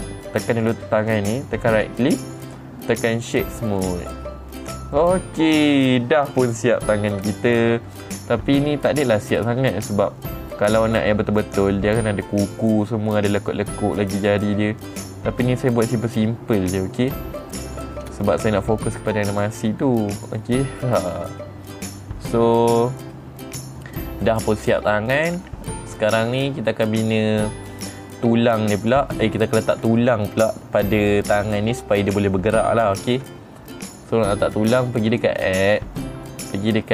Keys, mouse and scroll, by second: 1.1 click, 2.2 right click, 4.3 click, 5.1 middle click, 5.1 scroll down 2, 5.4 middle click, 8.4-9.6 middle drag, 9.8-10.2 scroll up 3, 10.4-11.5 middle drag, 13.4-18.1 middle drag, 18.5 scroll down 2, 18.8 middle click, 19.8 click, 20.9 middle click, 24.8 click, 25.7 g, 26.7 right click, 29.3 click, 35.6 click, 35.9 click.